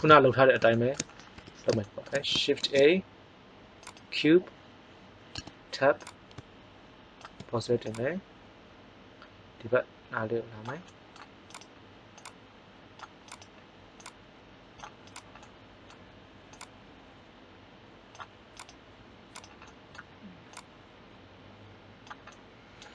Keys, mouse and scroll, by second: 1.3 KP_1, 2.5 shift+a, 5.3 Tab, 5.9 click, 12.0 click, 15.3 middle click, 16.1-18.0 drag, 20.4 click.